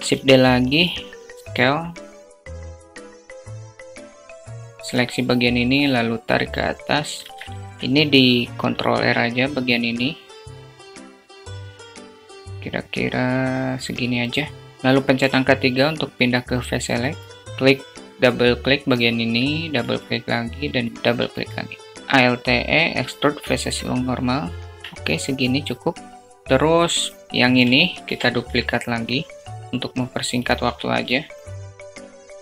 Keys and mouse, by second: 0.0 s, 3.3 Tab, 3.6 alt+z, 6.5 alt+z, 7.1 Tab, 7.6 Tab, 8.2 ctrl+r, 14.7 3, 19.0 shift+click, 19.2 shift+click, 20.1 shift+click, 22.0 alt+e, 24.8 Tab, 25.8 shift+click, 27.4 shift+d, 30.0 s, 32.3 alt+z.